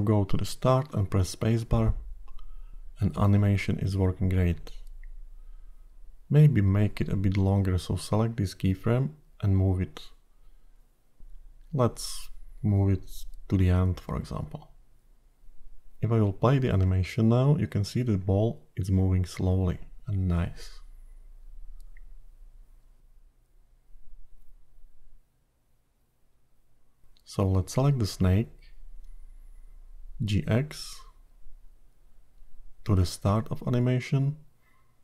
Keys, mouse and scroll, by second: 0.4 click, 0.8 space, 4.4 space, 5.4 click, 7.0 g, 16.1 click, 16.6 space, 26.1 space, 27.4 click, 28.2 click, 28.9-30.0 scroll down 2, 31.3 g.